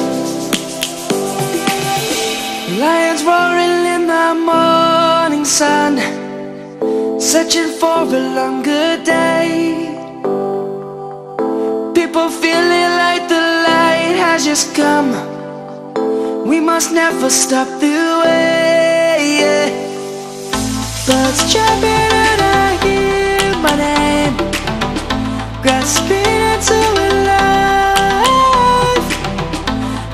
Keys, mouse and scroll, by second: 1.8 click, 7.7 right click, 8.7 click, 12.0 right click, 12.9-14.6 drag, 16.2 ctrl+a, 17.7 click, 18.8-20.3 alt+drag, 21.5-23.5 alt+shift+drag, 26.3 ctrl+=, 26.6 space, 26.7 click, 26.9 space, 28.1-28.8 drag.